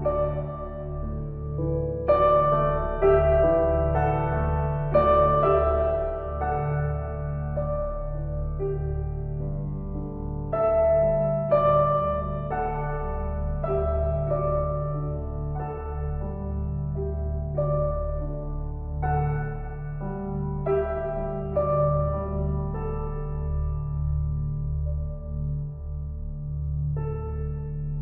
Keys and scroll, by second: 0.7 ctrl+g, 6.7 ctrl+j.